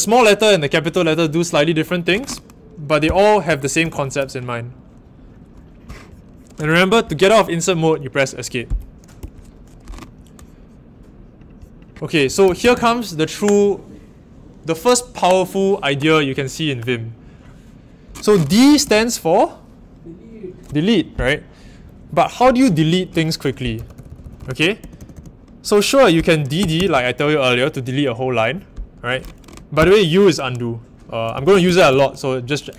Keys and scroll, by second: 3.0 o, 3.4 Escape, 3.7 u, 12.0-13.2 typing, 18.4-18.8 typing, 23.5-26.7 typing.